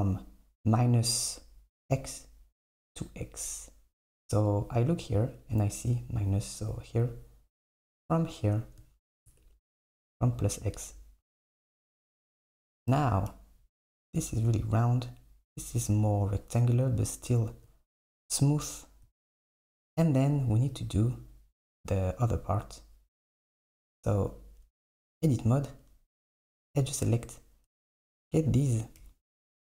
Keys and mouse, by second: 8.2 click, 9.4 Tab, 9.9 Tab, 10.8 Tab, 13.0 KP_8, 24.0 Tab, 26.5-28.2 drag.